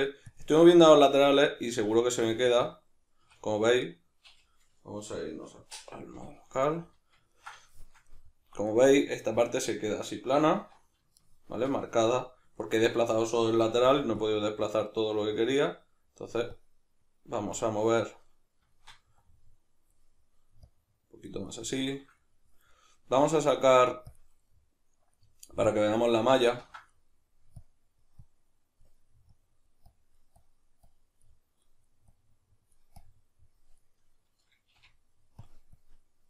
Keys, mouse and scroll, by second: 0.6-14.2 middle drag, 3.2 \, 6.1 KP_Divide, 10.5 alt+q, 13.7 f, 14.6-18.3 drag, 18.3 middle click, 19.2 click, 20.1 middle click, 20.7 click, 21.5-25.7 middle drag, 23.1 q, 25.7-26.9 drag, 26.6 ctrl+z, 26.9 middle click, 27.6-31.2 drag, 31.2 middle click, 32.0-33.8 drag, 33.8-35.5 middle drag, 34.8 f, 35.8 click.